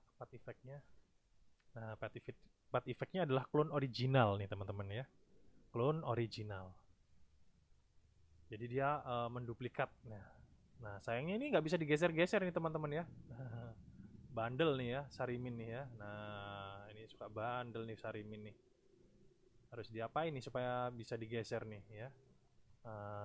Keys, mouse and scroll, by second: 0.8 click, 9.6-10.4 drag, 11.1-11.9 drag, 12.4-13.2 drag, 13.7 click, 15.0 click, 16.2 click, 17.3 click, 18.4-19.1 drag, 19.5-20.2 drag, 20.6 click, 21.6-22.2 drag.